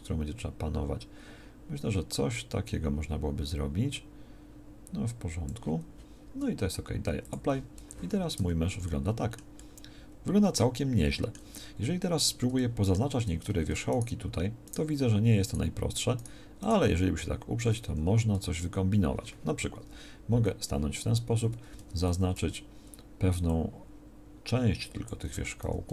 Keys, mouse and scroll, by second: 7.8 z, 8.3 Tab, 17.8 a, 19.7 KP_1, 21.2 z, 21.7 a, 22.0 a, 22.3 b, 25.6 s.